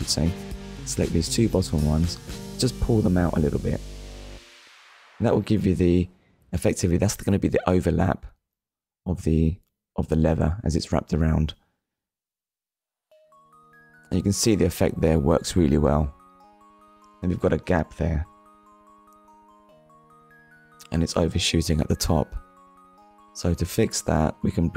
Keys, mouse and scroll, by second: 0.8 click, 1.5 shift+click, 2.6 click, 8.9 click, 11.0-11.5 scroll down 2, 12.0 shift+middle click, 13.2 click, 13.8 scroll down 1, 14.4 click, 14.7 middle click, 21.4 middle click, 24.0 KP_1.